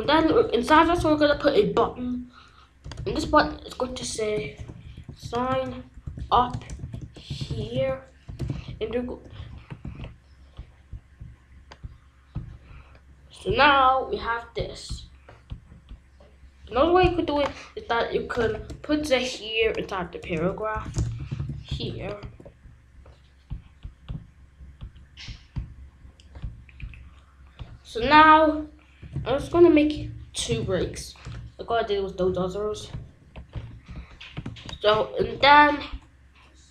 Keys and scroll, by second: 0.0 b, 0.3 u, 1.3 Return, 2.8 Return, 3.2 ctrl+z, 4.1-8.4 typing, 8.5 Left, 9.8 ctrl+s, 18.5 BackSpace, 19.0 Right, 20.2-22.1 typing, 22.2 ctrl+s, 28.0 Return, 28.7-31.0 typing, 33.1 ctrl+v, 33.7 ctrl+z, 35.2 ctrl+s.